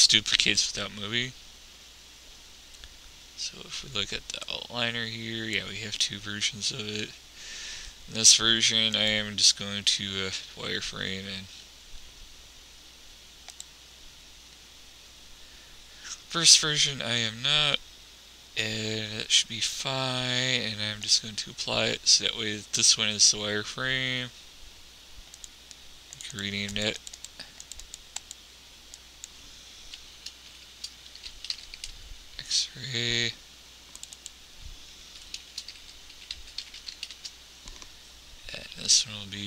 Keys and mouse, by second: 4.8-6.7 drag, 9.3-10.5 drag, 21.6-23.2 drag, 23.2 middle click, 25.8-28.5 drag, 34.4-36.2 drag, 37.2 n, 39.3-39.4 drag.